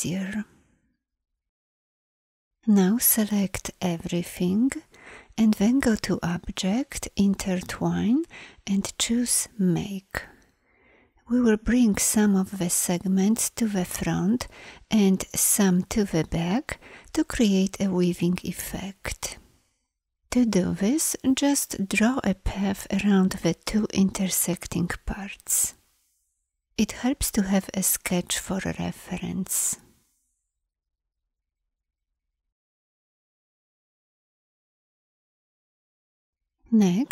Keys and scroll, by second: 37.0 ctrl+a.